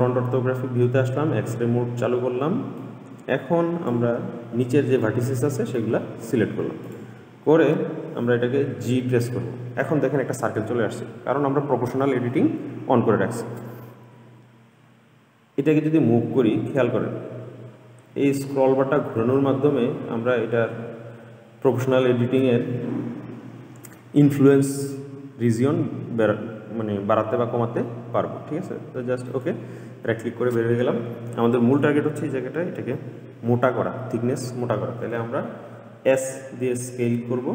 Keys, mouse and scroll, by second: 3.0 click, 4.8-7.0 middle drag, 7.0 click, 9.0 g, 30.5-33.5 scroll down 1, 36.9 s.